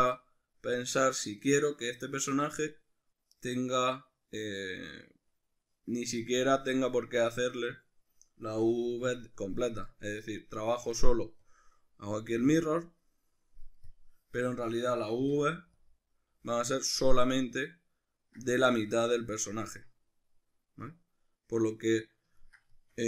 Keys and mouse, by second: 8.5 a, 11.4-13.9 drag, 15.2 u, 16.9-21.4 ctrl+middle drag.